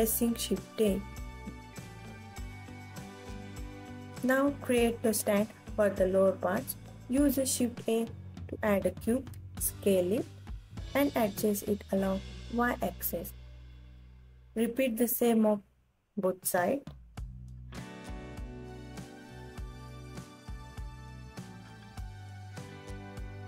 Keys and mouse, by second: 1.9 shift+a, 5.6 s, 7.0 click, 7.3 KP_3, 9.1 s, 10.0 y, 13.4 click, 13.8 KP_1, 15.4 s, 15.7 x, 18.5 click, 19.1 alt+middle drag, 19.4 alt+click, 19.5 alt+middle click, 19.7 click, 20.0 KP_3, 21.4 r, 22.8 g.